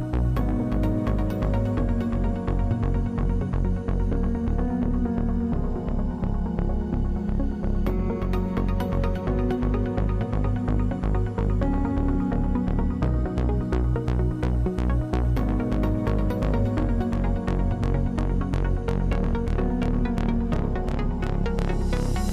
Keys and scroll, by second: 9.7 Return, 14.8 g, 19.5 Return.